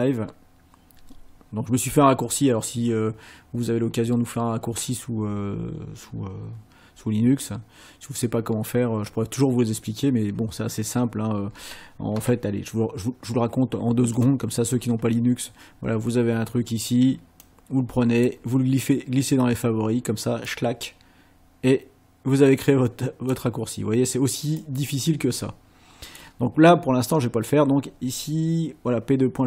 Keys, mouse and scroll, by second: 14.1 click, 17.5 click, 20.5-23.5 drag, 24.6-26.3 drag.